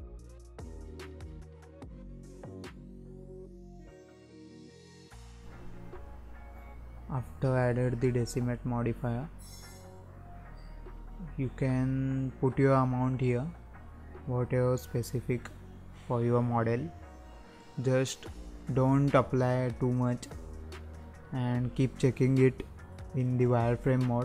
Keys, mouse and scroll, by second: 4.3-8.6 drag, 21.4 click, 22.9-23.3 scroll up 2, 23.3-24.1 scroll down 1, 24.1 scroll down 1.